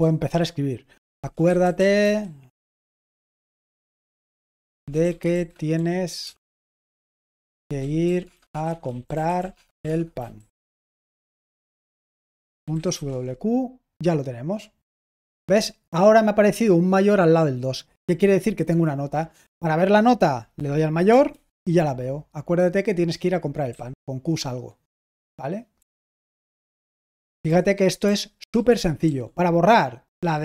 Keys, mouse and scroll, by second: 0.9-13.2 typing, 15.0-15.8 typing, 23.6 q, 26.0-26.7 typing, 27.8-30.4 typing.